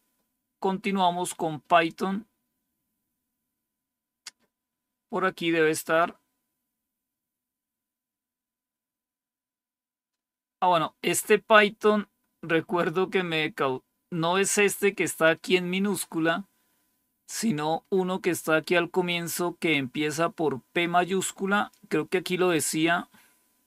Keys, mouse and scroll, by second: 1.6 click, 13.0-15.7 drag, 16.4-19.8 scroll up 1, 19.8-23.6 drag.